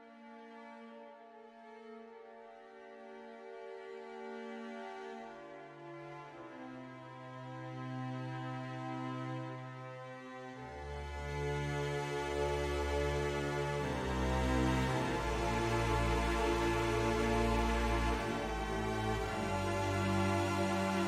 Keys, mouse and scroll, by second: 1.0 click, 1.5 middle click, 2.5 middle click, 3.0 s, 3.8 click, 5.6 middle click, 7.3 middle click, 9.2 middle click, 10.2 middle click, 12.5 shift+click, 13.4 shift+click, 13.9 middle click, 14.7 middle click, 16.4 s, 17.6 click, 18.4 middle click, 19.6 shift+middle click, 20.3 middle click.